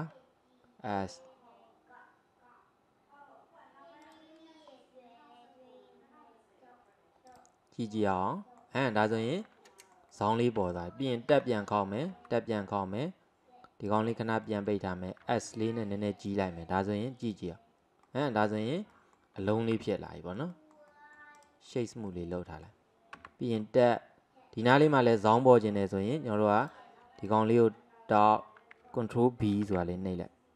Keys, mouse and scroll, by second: 7.4 click, 8.2-11.4 middle drag, 11.4 Tab, 11.8 middle click, 12.2 Tab, 13.9 click, 14.5 middle click, 15.3 s, 17.3 click, 18.1 middle click, 18.6-19.0 scroll down 2, 19.0 middle click, 19.8 Tab, 20.1-21.4 middle drag, 21.4 right click, 22.2-23.2 middle drag, 23.2 Tab, 23.6-25.8 scroll up 2, 25.8 click, 26.6 click, 27.3 alt+click, 29.7 ctrl+b.